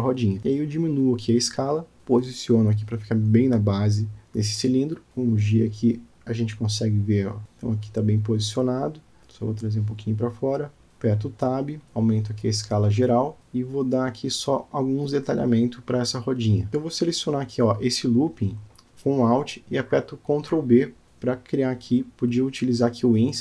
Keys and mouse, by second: 1.6 KP_Decimal, 2.4-3.9 middle drag, 4.4 g, 9.5 g, 10.9 middle click, 11.1 Tab, 12.1 s, 14.1-15.5 middle drag, 16.5 click, 17.1 alt+click.